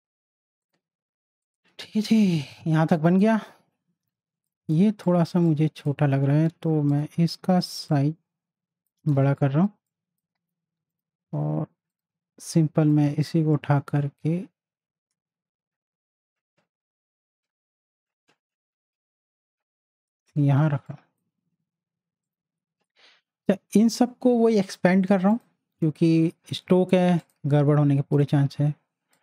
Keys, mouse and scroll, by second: 4.1 z, 4.5 click, 5.0 space, 5.0 click, 6.4 v, 6.9 click, 7.9 alt+shift+click, 9.3 z, 9.3 click, 9.7 space, 9.9 click, 10.3 space, 10.9-20.2 drag, 20.6 z, 20.9-25.3 drag, 25.3 click.